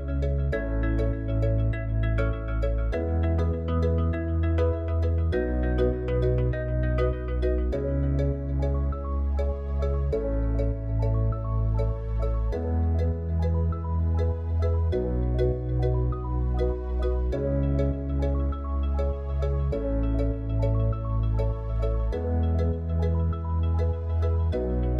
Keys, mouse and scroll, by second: 15.8 click, 20.3-21.5 middle drag, 22.4 click.